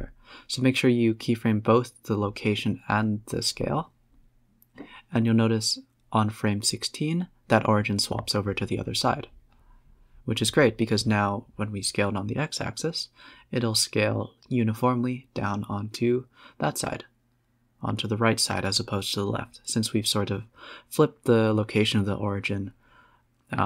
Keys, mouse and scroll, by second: 3.5-5.8 drag, 6.5 click, 7.5 Right, 7.9 Left, 8.4 Right, 8.8 Left, 9.2 Right, 9.4 Tab, 9.7 Left, 10.1 Right, 10.4 Left, 10.7 Right, 10.8 Tab, 12.8-15.1 drag, 15.6 s, 17.7 s, 18.5 ctrl+z, 18.8 ctrl+z, 19.1 s.